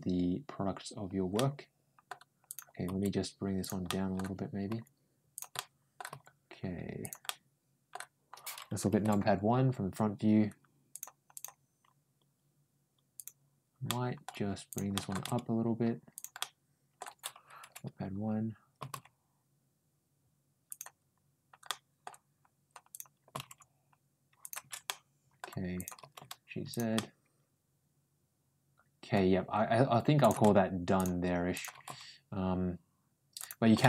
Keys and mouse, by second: 1.2 middle click, 2.3 click, 2.7 g, 3.7 middle click, 4.5 g, 5.4 middle click, 5.9 g, 7.1 middle click, 10.7 click, 11.2 click, 13.0 click, 13.7 middle click, 14.5 click, 14.8 middle click, 15.0 g, 16.2 middle click, 18.6 g, 21.5 middle click, 22.7 click, 23.1 g, 24.7 middle click, 25.6 click, 25.8 ctrl+g, 26.8-28.9 middle drag, 30.0 click, 30.3 g, 31.4 click, 31.5 g, 33.6 middle click.